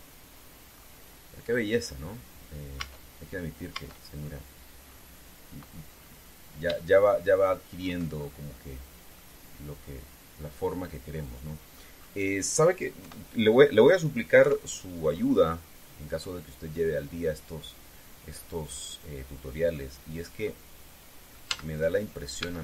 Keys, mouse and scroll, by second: 0.4 right click, 1.4-1.9 scroll up 2, 2.6 scroll down 2, 3.5 Tab, 4.5 Tab, 4.9-5.3 scroll down 2, 5.6 scroll up 2, 6.7-7.0 scroll up 2, 7.5-8.5 shift+middle drag, 8.9-9.3 shift+scroll down 3, 9.9-12.7 middle drag, 13.7 KP_1, 15.1 KP_3, 16.2-16.7 scroll up 2, 16.9-17.3 scroll down 2, 20.5 middle click, 22.2 z.